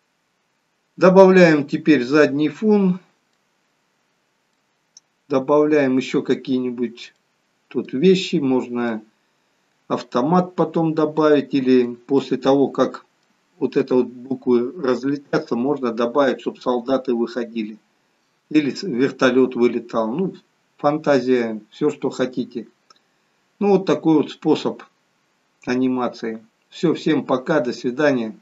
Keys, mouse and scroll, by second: 1.3 middle click, 4.7 middle click, 7.3 middle click, 9.1 middle click, 12.3 middle click, 13.8 KP_0.